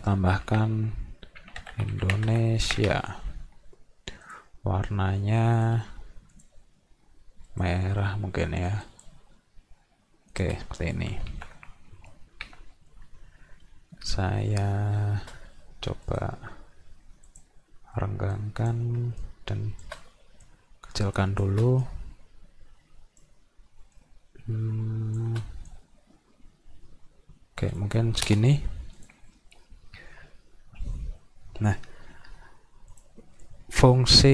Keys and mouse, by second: 1.7 d, 2.3 s, 2.8 a, 4.2 click, 5.6-6.1 drag, 6.3 click, 7.5 drag, 8.8 click, 10.3 click, 16.1 click, 17.3 click, 18.3 click, 19.3 shift+click, 20.5 shift+click, 21.9-23.2 drag, 23.9-25.2 shift+drag, 25.7-27.8 drag, 29.0 click, 32.9 click.